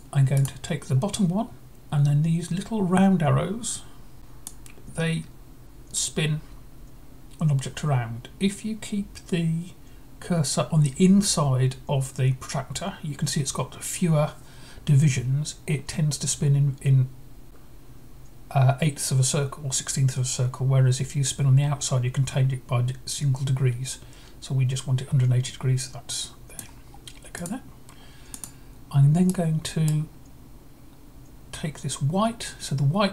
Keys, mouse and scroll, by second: 4.3-6.2 drag, 21.2-26.4 drag, 27.2-29.2 drag, 29.1-30.2 right drag.